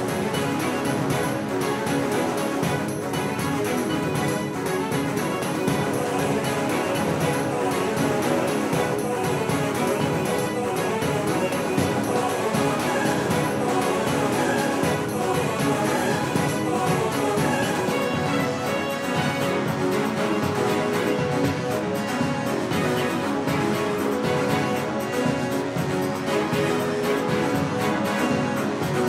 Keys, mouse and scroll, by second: 7.2-9.6 right drag, 9.2-11.4 middle drag, 13.2-16.3 middle drag, 17.7-24.1 right drag, 24.1 shift+d.